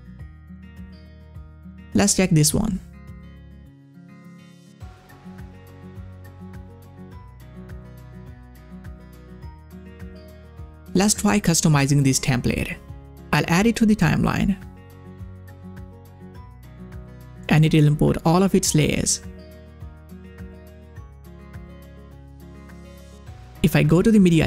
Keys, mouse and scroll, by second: 2.0 scroll down 1, 2.0 click, 14.8 click.